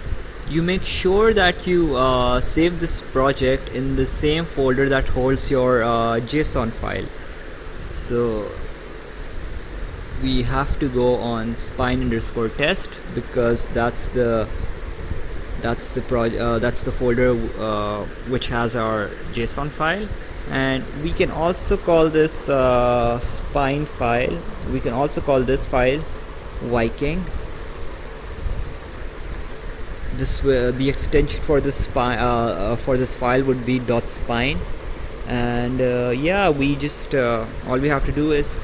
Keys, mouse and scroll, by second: 11.8 click, 16.1 click, 22.2 click, 22.5 Caps_Lock, 22.8-27.0 typing, 23.0 Caps_Lock, 28.4 click.